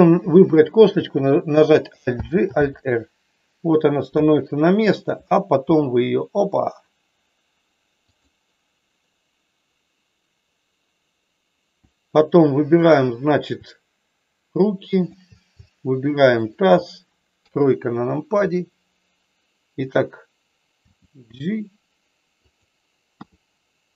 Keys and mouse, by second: 2.1 alt+g, 2.5 alt+r, 4.0 KP_1, 5.6 r, 8.0 click, 16.3 shift+click, 17.4 KP_3, 20.8 g, 22.4 click, 23.1 r.